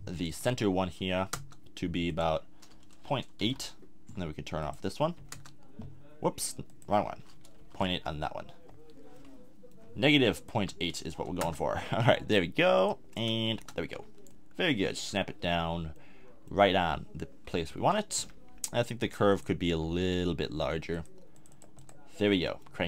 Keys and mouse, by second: 2.8-9.2 drag, 9.2-10.3 middle drag, 10.3-14.4 drag, 17.8 Tab, 18.2 a, 22.3-22.8 middle drag.